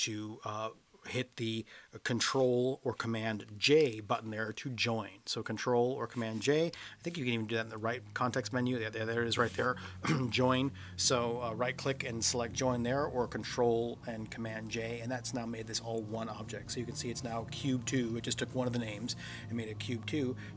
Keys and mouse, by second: 3.7 ctrl+j, 6.7 ctrl+z, 7.7-14.7 right drag.